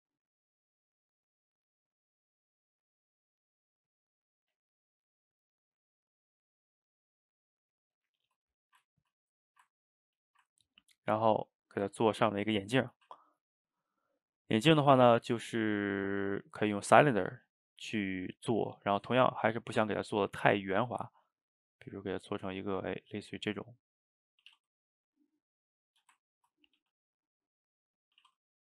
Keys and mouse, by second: 0.4-3.4 shift+drag, 4.0-7.1 middle drag, 8.2-8.6 middle drag, 8.6 shift+right click, 8.9-9.5 ctrl+middle drag, 9.5 shift+right click, 9.8-13.0 ctrl+middle drag, 13.0 shift+a, 18.0-20.1 ctrl+middle drag, 20.1-23.1 drag, 24.0 middle click, 24.4 s, 25.9-26.8 shift+middle drag, 26.8 g.